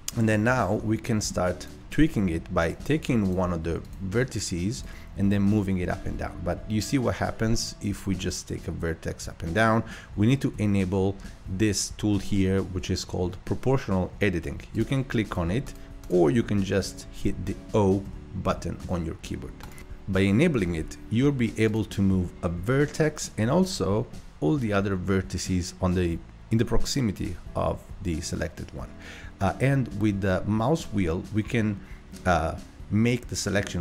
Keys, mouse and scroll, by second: 0.2-0.5 scroll up 4, 0.5 Tab, 0.8-1.6 middle drag, 1.6 click, 2.6 click, 3.3 click, 3.8 click, 4.3 click, 4.8 click, 5.3 g, 14.7 click, 15.3 click, 15.7 click, 16.0 click, 18.0 o, 18.5 o, 18.8 o, 19.6 click, 21.7 click, 22.6 g, 26.0 right click, 29.3-29.9 right drag, 31.0 right click, 32.8-33.2 right drag, 33.4-33.8 right drag.